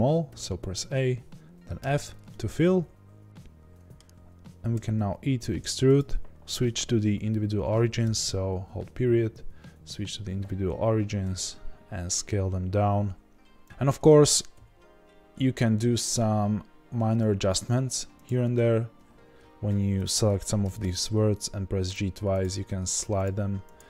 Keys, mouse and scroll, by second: 2.2-10.1 middle drag, 4.7 e, 10.1 ., 11.2 s, 13.6-18.2 middle drag, 13.6-14.0 scroll up 2, 14.5 s, 18.2 click, 20.6-21.9 middle drag, 20.6 g, 21.9 click, 22.5-23.7 middle drag, 22.5 g, 23.7 click.